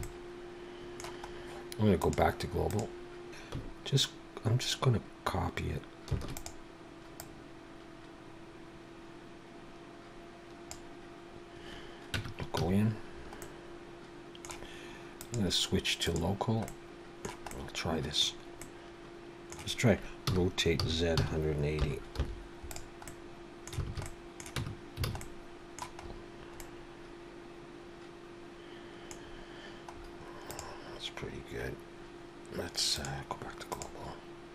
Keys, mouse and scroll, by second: 0.0 middle click, 1.3-2.0 scroll up 2, 2.0 click, 3.4 shift+KP_1, 6.1 shift+d, 7.2 click, 12.2 Tab, 12.6 a, 13.4 middle click, 15.2 click, 17.5 middle click, 18.6 middle click, 20.3 r, 23.1 middle click, 23.9 alt+a, 24.1 middle click, 24.6 Tab, 25.1 alt+a, 25.2 middle click, 26.0-26.5 scroll up 3, 26.5 middle click, 29.2-29.6 scroll down 2, 29.8-30.3 scroll up 3, 30.4 click, 33.0 click.